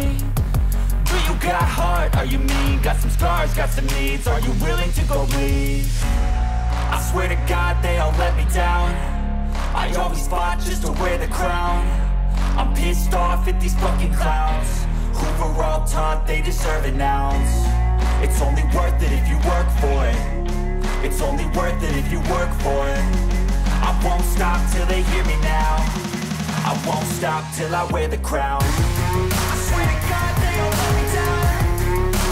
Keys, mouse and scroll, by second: 0.4 click, 1.9-3.1 drag, 3.2 click, 5.2 click, 8.2 click, 9.5 r, 10.6 z, 14.4 click, 16.2 click, 18.2 typing, 19.0-21.0 Return, 23.5 click, 24.7 click, 26.8 click, 30.6 click, 32.0 click.